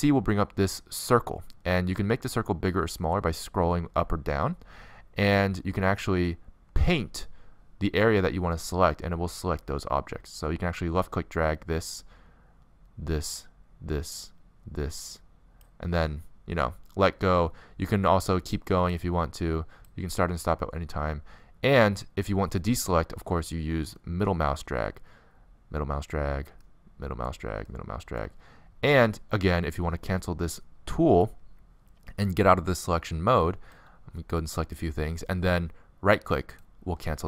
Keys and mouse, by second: 36.1-37.2 right drag.